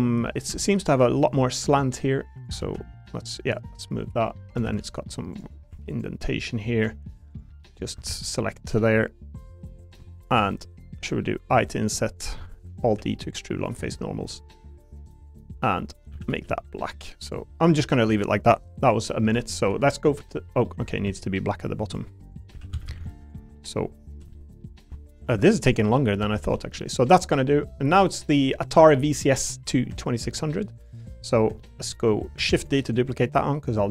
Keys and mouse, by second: 0.3 middle click, 0.5 2, 0.7 click, 1.3 click, 2.6 ctrl+z, 3.5 click, 4.6 ctrl+r, 5.7 3, 5.9 click, 6.3 middle click, 7.3 ctrl+click, 7.6 middle click, 8.1 ctrl+z, 9.4 middle click, 10.3 shift+middle click, 10.5 click, 12.4 middle click, 12.9 alt+r, 13.0 alt+e, 15.2 click, 16.1 a, 16.3 g, 17.2 click, 17.7 middle click, 18.9 click, 19.4 shift+middle click, 20.3 middle click, 20.6 middle click, 20.9 ctrl+r, 22.3 click, 22.5 3, 22.7 a, 22.8 a, 23.2 alt+click, 23.5 middle click, 24.3 middle click, 25.1 shift+click, 25.6 ctrl+shift+click, 26.2 a, 26.4 g, 27.0 click, 29.0 middle click, 30.0 shift+middle click, 30.3 middle click, 30.8 click, 31.0 middle click, 31.6 shift+middle click, 32.5 shift+d, 32.9 click.